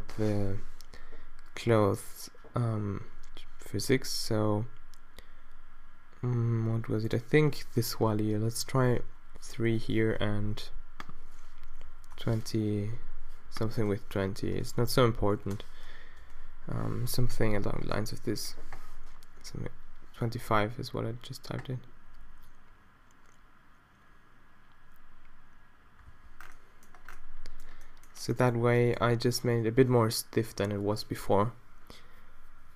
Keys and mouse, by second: 14.7 BackSpace, 14.9 BackSpace, 16.4 shift+Left, 17.4 alt+a, 26.6 alt+a, 29.1 alt+a.